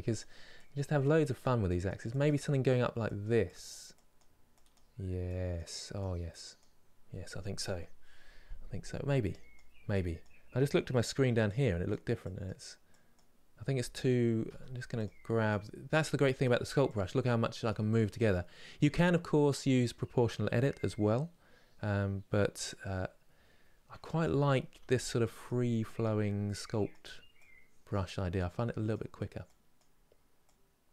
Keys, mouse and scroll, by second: 14.2 f, 15.2-24.4 drag, 24.4 f, 25.6-30.9 drag.